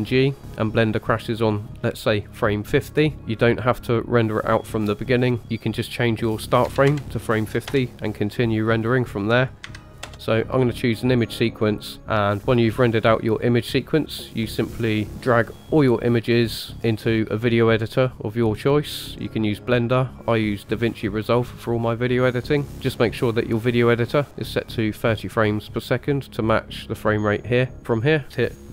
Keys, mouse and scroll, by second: 5.4 click, 9.3 click, 28.0-28.7 drag.